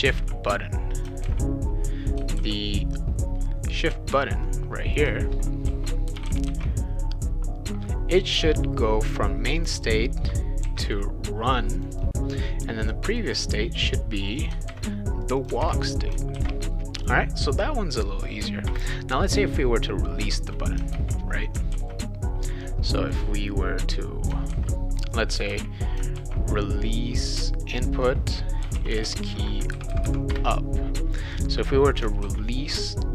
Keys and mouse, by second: 0.1 ctrl+c, 1.0 click, 1.2 ctrl+v, 2.3 ctrl+z, 4.5 click, 5.4-7.0 typing, 9.5 click, 9.7 click, 10.6 shift+r, 11.7 click, 11.9 click, 13.1 click, 13.3 click, 14.2 click, 14.4 click, 14.7 ctrl+c, 15.2 click, 15.4 click, 15.6 ctrl+v, 16.4 ctrl+s, 17.0 click, 18.7 Return, 20.9 ctrl+v, 21.7 ctrl+z, 23.1-24.3 drag, 24.5 ctrl+c, 25.1 click, 25.5 ctrl+v, 26.2 ctrl+z, 27.6 click, 27.8 click, 28.4-29.5 typing, 30.3 Return, 32.2 ctrl+s.